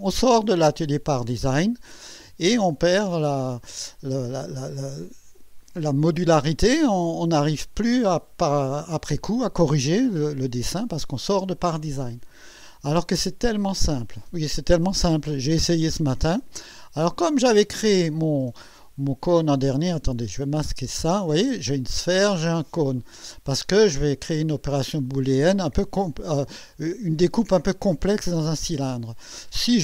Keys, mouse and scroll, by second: 17.5 click, 18.8-19.6 drag, 20.5 click, 20.8 space, 23.1 space, 23.6-24.6 drag, 25.1 click.